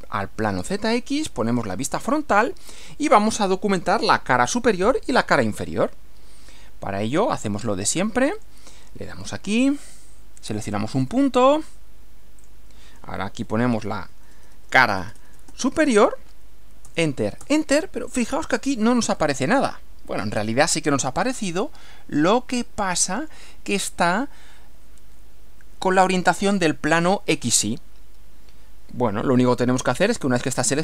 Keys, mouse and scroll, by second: 1.5 click, 8.4 click, 11.0 click, 12.4 click, 13.7-15.9 typing, 16.8 Return, 21.2-23.5 middle drag.